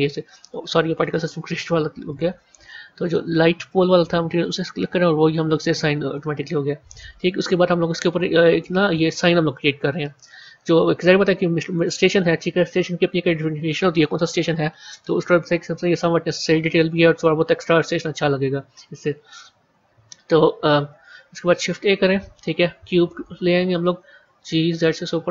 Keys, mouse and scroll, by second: 2.9-5.9 drag, 8.5 a, 9.9-13.0 middle drag, 14.7 KP_1, 14.9 KP_3, 21.4 shift+a, 24.2 g.